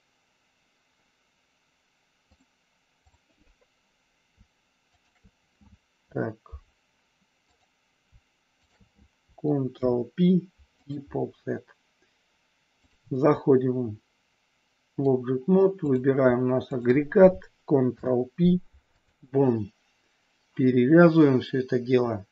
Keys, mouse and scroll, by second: 2.3 click, 7.4 click, 9.8 ctrl+p, 12.9-15.0 drag, 17.8 ctrl+p.